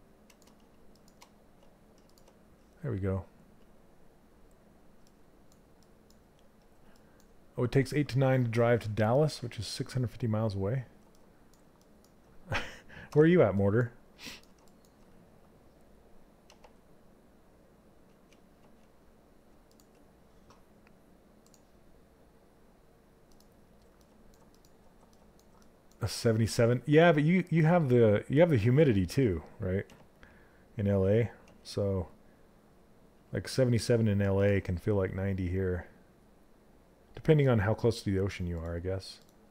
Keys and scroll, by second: 16.0 z, 29.4 z.